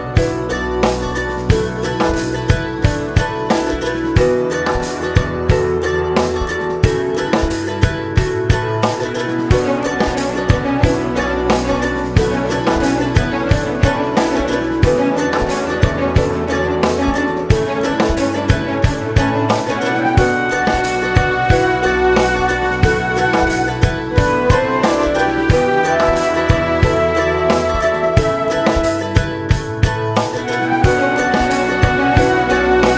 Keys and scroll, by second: 1.5 ctrl+1, 2.1 alt+z, 2.9 alt+z, 23.2 alt+z, 27.9 Escape.